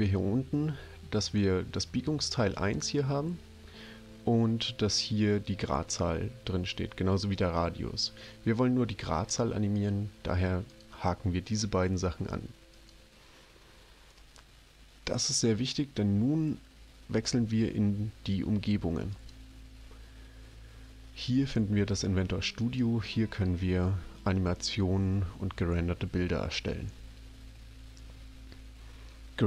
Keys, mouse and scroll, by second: 9.8 click, 10.6 click, 12.7 click, 19.1 click, 22.6 click.